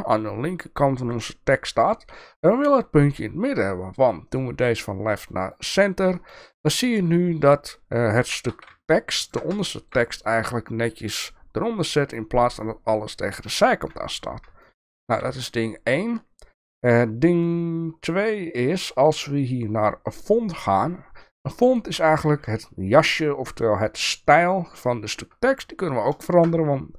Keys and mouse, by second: 4.3-5.5 drag, 6.3 shift+middle click, 8.2 g, 9.6 shift+middle click, 14.6 shift+middle drag, 18.8 click, 20.3 click, 25.9-26.4 shift+middle drag.